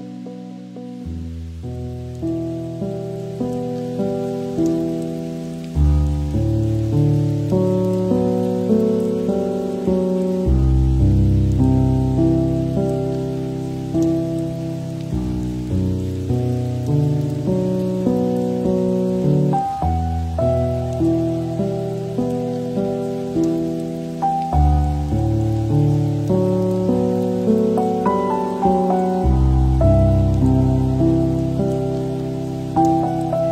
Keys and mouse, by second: 3.4 ctrl+l, 5.3 middle drag, 7.3 drag, 7.4 middle click, 9.5 middle click, 10.2 middle click, 11.1 click, 11.7 g, 12.9 middle click, 14.4 middle click, 14.6-15.6 middle drag, 16.2 shift+middle click, 17.1 g, 18.9 middle drag, 19.5-19.8 middle drag, 24.2-26.2 shift+drag, 26.3 click, 32.7 click.